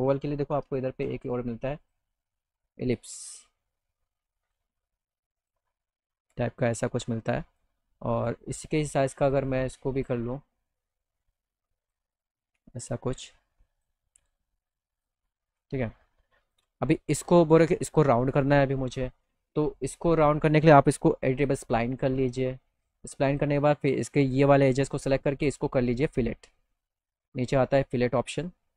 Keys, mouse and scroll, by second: 1.9 click, 3.1-4.5 drag, 5.4 right click, 6.5-7.6 drag, 8.2 click, 9.3 click, 11.0 click, 13.0 click, 14.9 click, 15.5 middle click, 16.5 click, 19.8 click, 21.2 e, 22.3 click, 22.8 middle click, 23.4 click, 24.3 click, 25.6 click, 27.9 click.